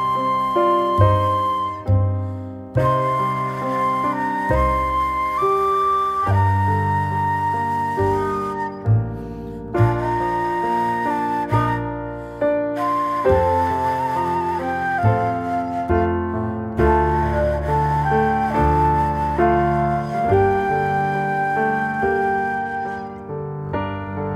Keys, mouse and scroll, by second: 0.3 ctrl+z, 0.5 ctrl+z, 1.1 click, 1.9 s, 2.8 click, 4.1 ctrl+b, 5.8 click, 7.0 shift+click, 7.8 ctrl+z, 8.1 ctrl+click, 9.4 ctrl+b, 12.4 click, 12.9-14.4 middle drag, 17.3 middle click, 18.4 alt+middle click, 19.2 click, 19.5 click, 20.2 s, 22.4 click, 23.5 s.